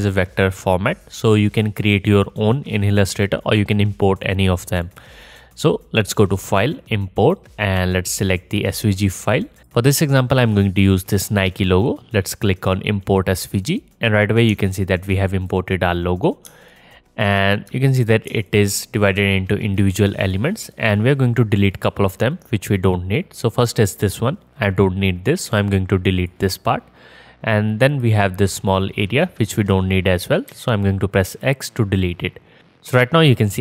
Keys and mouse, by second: 4.9-19.8 drag, 19.8-20.3 middle drag, 20.3 click, 20.3-20.9 middle drag, 20.9 click, 20.9-23.0 middle drag, 23.0 click, 23.2-28.0 middle drag, 25.5 x, 28.0 click, 28.0-32.1 middle drag, 30.5 x.